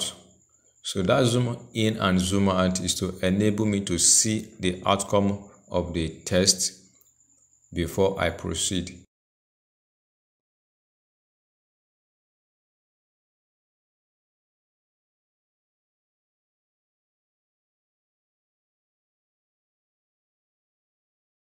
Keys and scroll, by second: 10.3 ctrl+c, 13.8 ctrl+v.